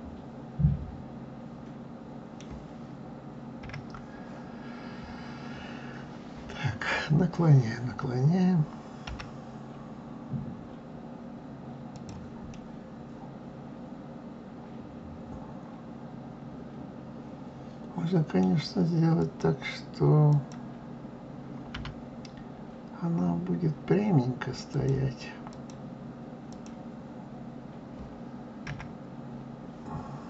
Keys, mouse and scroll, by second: 3.5 KP_1, 9.0 g, 12.4-15.5 middle drag, 19.1 click, 20.2 click, 21.7 r, 25.4 click, 26.5 click, 28.6 KP_1.